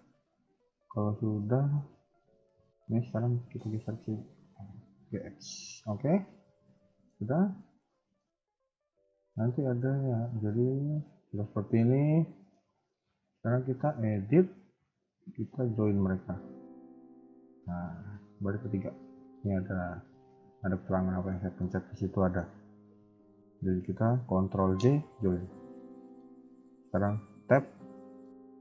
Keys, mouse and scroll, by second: 1.4 Tab, 1.7 KP_1, 3.3 g, 5.8 KP_3, 6.0-6.4 scroll down 2, 6.4 Tab, 6.8 shift+middle click, 7.1-7.5 scroll up 1, 7.5 Tab, 7.8 middle click, 9.0 click, 9.4 middle click, 9.8 KP_1, 10.4 middle click, 13.6 Tab, 15.0 shift+click, 17.0 KP_1, 17.2 KP_3, 19.1 shift+middle click, 21.4 shift+middle click, 24.7 ctrl+j, 25.8 shift+middle click, 27.3 Tab, 27.7 middle click.